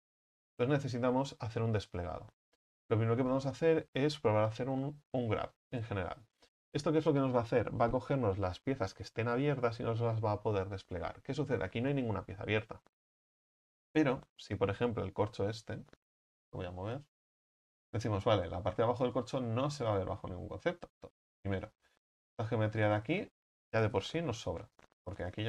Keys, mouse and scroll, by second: 0.5 Tab, 2.2 a, 2.7 Tab, 3.1 a, 3.3 a, 5.7 u, 14.9 right click, 15.4 l, 17.4-19.5 drag, 19.5-20.2 middle drag, 20.2-21.3 scroll up 5, 21.3-21.7 scroll up 4, 21.7 right click, 22.4 alt+shift+right click, 22.9-25.0 scroll down 3, 25.0 x.